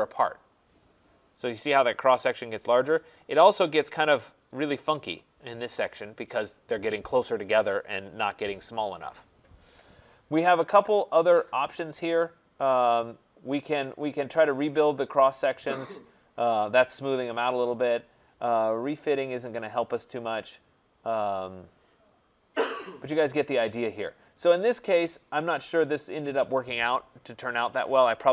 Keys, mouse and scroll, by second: 1.4 right click, 3.0 middle click, 3.1 middle click, 3.1 middle click, 3.2 middle click, 4.1 scroll, 4.5 right click, 9.2 right click, 15.5-23.0 drag, 23.1-24.9 drag, 24.9 middle click, 25.0-28.2 scroll.